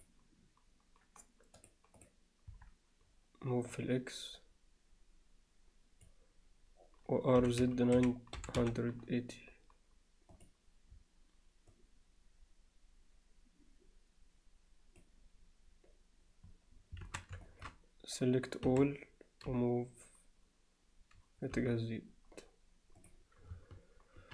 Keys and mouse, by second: 0.0 Escape, 0.0-1.6 drag, 1.6-2.1 drag, 2.5 KP_1, 3.8-6.6 drag, 7.4 r, 11.8-15.8 drag, 17.1 alt+a, 17.5 alt+shift+middle click, 18.7 a, 19.5 g.